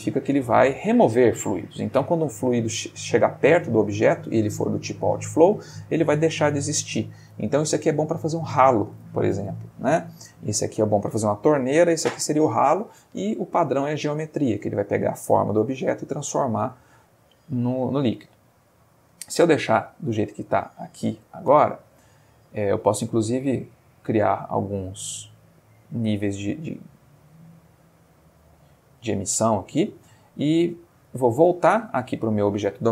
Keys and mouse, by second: 16.7 click, 17.8-18.5 middle drag, 18.6-19.2 ctrl+middle drag, 20.0-21.4 shift+middle drag, 24.0 click, 28.5 space, 29.7 space, 30.5 click.